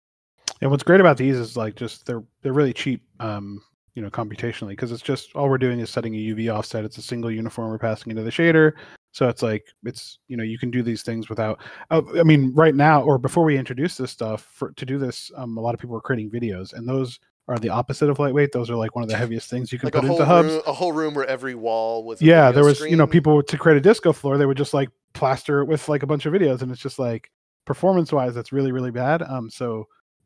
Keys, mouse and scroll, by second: 0.6 s, 24.3 click, 30.1 s.